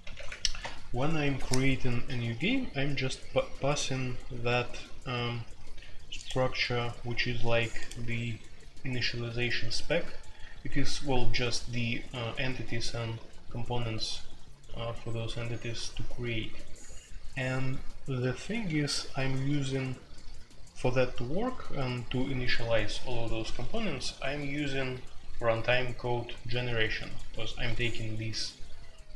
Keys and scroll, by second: 0.0-1.1 typing.